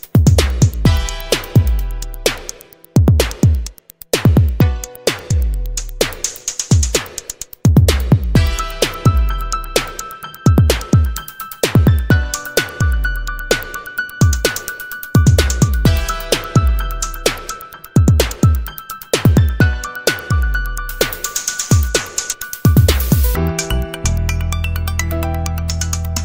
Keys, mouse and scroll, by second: 2.4 click, 3.5 click, 5.9 click, 7.0 click, 7.5 click, 9.1 0, 10.7 click, 11.6 click, 12.7 click, 14.1 click, 14.9 click, 15.6 click, 17.2 click, 20.5-23.5 drag, 23.9 click, 25.4 click, 25.8 click.